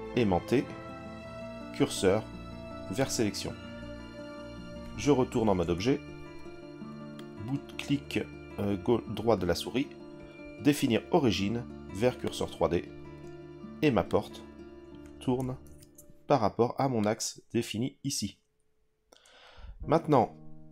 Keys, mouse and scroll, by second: 5.6 Tab, 7.1-12.4 right drag, 12.4 click, 14.0 click, 14.2 click, 15.6 ctrl+z, 17.0 click.